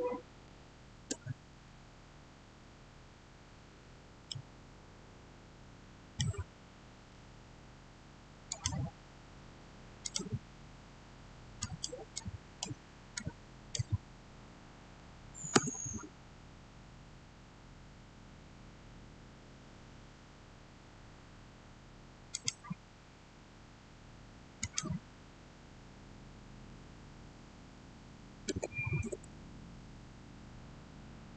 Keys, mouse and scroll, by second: 1.4 Return, 3.7 scroll up 1, 4.1-5.9 middle drag, 5.9 scroll down 1, 8.3 scroll down 1, 8.4-14.0 drag, 14.0 scroll down 1, 15.5 Return, 22.2 click, 24.5 click, 28.0-28.3 typing, 28.9 Return.